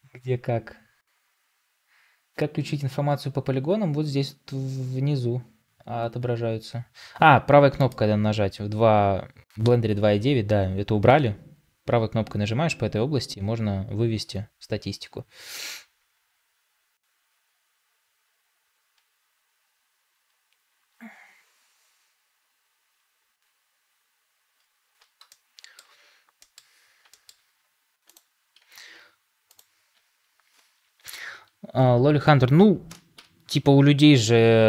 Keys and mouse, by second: 25.2-25.7 middle drag, 26.3 middle click, 27.0 shift+middle drag, 33.0 ctrl+j.